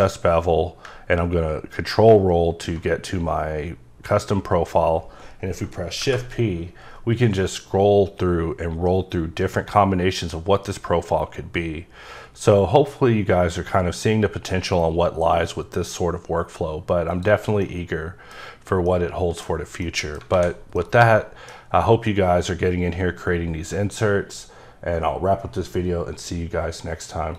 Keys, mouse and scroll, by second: 1.4-2.0 ctrl+scroll up 2, 2.7-5.1 scroll up 2, 6.0 shift+p, 6.5-8.6 scroll up 4, 8.6 scroll up 2, 9.3-10.0 scroll up 1, 10.0-10.7 scroll up 1, 10.7-11.3 scroll up 1, 11.3-12.0 scroll up 2, 12.0-13.3 scroll up 1, 13.3-14.0 scroll up 1, 14.7-15.5 scroll up 1, 15.5 scroll up 1, 17.1 click, 17.6 middle click, 18.4 scroll down 1, 18.9 middle click, 19.8 middle click, 20.3 a, 20.5 scroll down 2, 20.7 middle click.